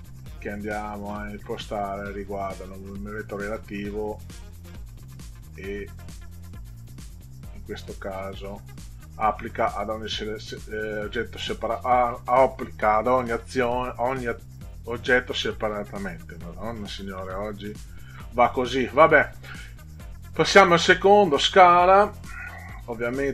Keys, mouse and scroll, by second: 2.5 click, 6.2 click, 7.5 click, 8.0 click, 17.2 middle click, 20.3 click, 22.2 click.